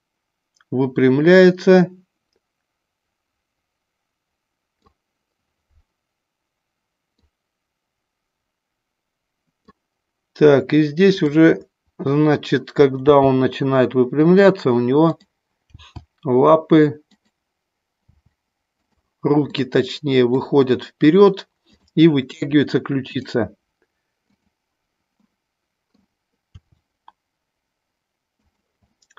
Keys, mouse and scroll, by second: 7.2-9.8 drag, 13.1 g, 15.7 g, 17.2 click, 18.1 r, 19.4 middle click, 23.0 click, 24.2 click, 25.2 middle click, 26.4 r, 28.9 middle click.